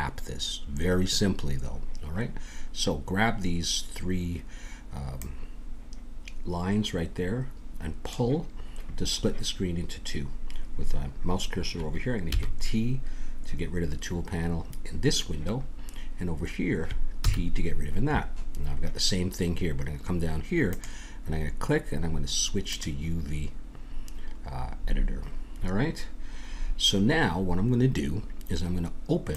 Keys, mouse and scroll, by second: 5.1-8.1 drag, 12.3 t, 17.2 t, 20.7-22.6 drag, 24.8-26.6 middle drag, 29.3 click.